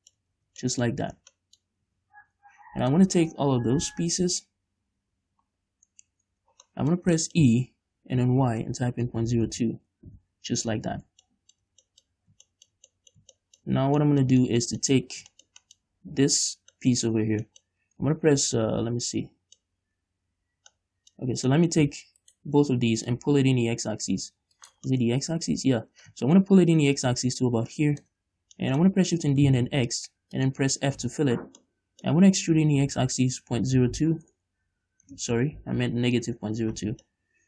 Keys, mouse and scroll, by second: 0.6 Tab, 1.2 Tab, 2.1 Tab, 3.1 right click, 5.8-6.3 scroll down 1, 6.3 1, 6.9 middle click, 7.8-8.4 scroll up 2, 8.4 e, 10.5 Return, 11.6 shift+middle click, 12.4-12.9 scroll up 3, 12.9-16.7 shift+middle drag, 14.0 scroll up 2, 15.3-15.6 scroll up 2, 16.7 right click, 17.1-22.5 middle drag, 17.7-18.0 scroll up 2, 22.5 shift+right click, 23.4-25.0 drag, 25.0 shift+right click, 25.2-26.3 middle drag, 26.3-28.9 drag, 28.9-30.8 middle drag, 29.6 shift+d, 30.8 shift+click, 31.3 f, 31.9-37.4 middle drag, 32.9 e, 34.7 Return, 35.4 ctrl+z.